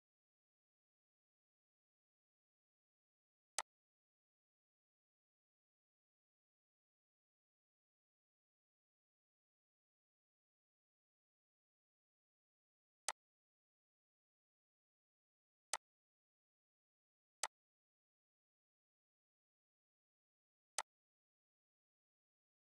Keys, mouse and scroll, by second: 13.0 click, 15.7-22.7 drag.